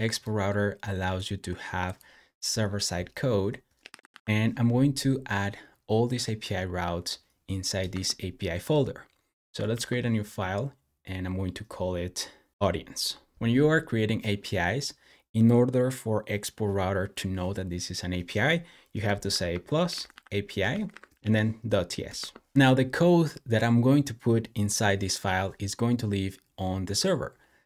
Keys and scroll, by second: 3.5-4.4 typing, 7.7 Return, 9.6 super+n, 12.5 typing, 19.1-23.0 typing.